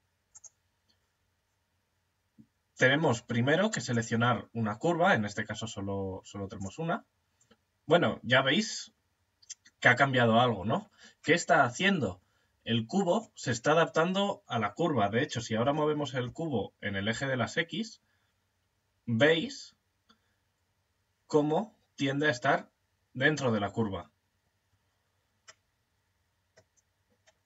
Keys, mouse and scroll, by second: 3.3 click, 10.9 middle click, 11.5-15.0 middle drag, 15.0 g, 25.1-27.4 middle drag.